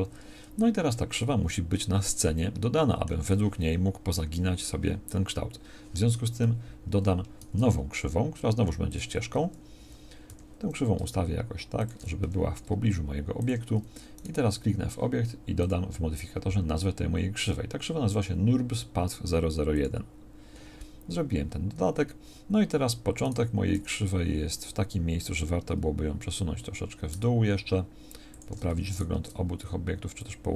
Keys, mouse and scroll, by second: 6.3 KP_1, 7.4 shift+a, 10.3 g, 12.2 r, 23.8 g.